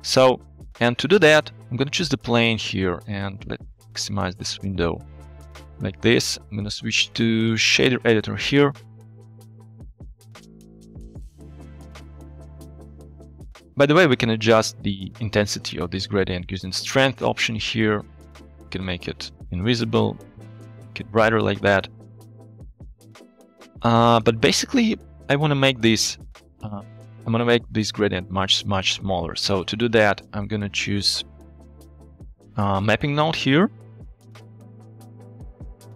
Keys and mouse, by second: 0.6 click, 4.1-5.3 drag, 5.4 click, 6.7-7.8 drag, 9.2 middle click, 11.6 click, 11.9 click, 12.5 g, 17.5 middle click, 17.7 click, 18.0 middle click, 18.1 click, 19.1 click, 19.9-22.0 drag, 22.0 click, 25.2 middle click, 28.7 shift+middle click, 29.2 middle click, 31.3 middle click, 34.7 click, 35.5 middle click.